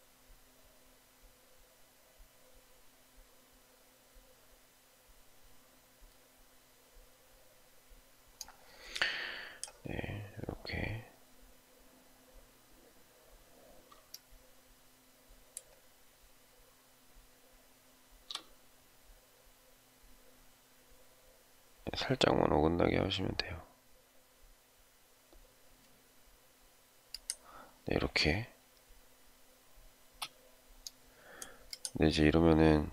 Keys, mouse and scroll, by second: 14.0 shift+middle click, 29.9 space.